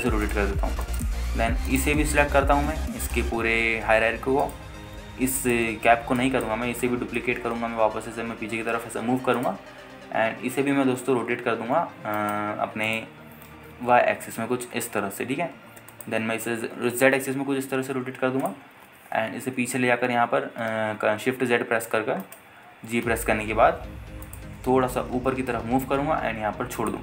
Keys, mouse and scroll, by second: 0.3 click, 0.5 r, 0.7 z, 1.5 click, 1.7 scroll down 1, 2.0 alt+shift+middle click, 2.9 click, 4.2-5.7 right drag, 6.5 ctrl+drag, 7.4-7.7 alt+shift+middle drag, 8.4 shift+d, 9.2 shift+z, 10.6 click, 11.9 r, 12.0 x, 13.4 right click, 14.1 click, 14.8 r, 15.0 y, 17.1 ctrl+click, 17.9 r, 18.0 z, 19.7 click, 20.1 g, 20.5 shift+z, 22.0 shift+z, 23.4 right click, 23.8 g, 24.2 shift+z, 25.5 click, 25.7 g, 26.2 z.